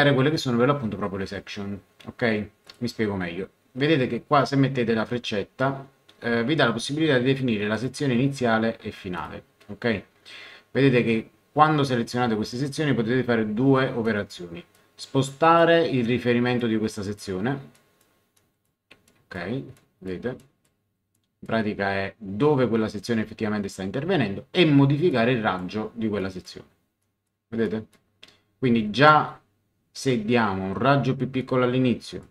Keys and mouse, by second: 2.6 click, 7.7 click, 9.1 click, 14.0 click, 15.5 click, 17.7 click, 25.1 click, 26.2 click, 30.0 click, 31.4 click.